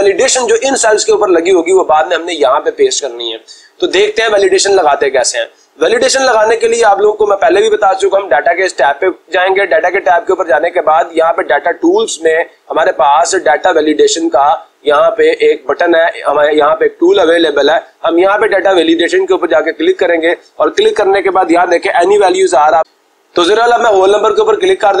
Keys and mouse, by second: 6.4-7.4 drag, 16.6-17.6 drag, 18.8-19.9 drag, 22.5 click, 24.4-25.0 drag.